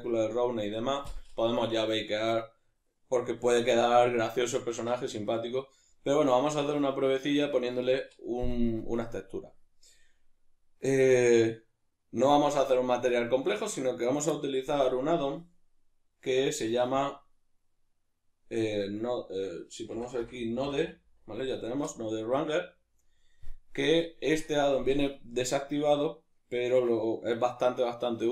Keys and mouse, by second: 15.2-28.3 drag.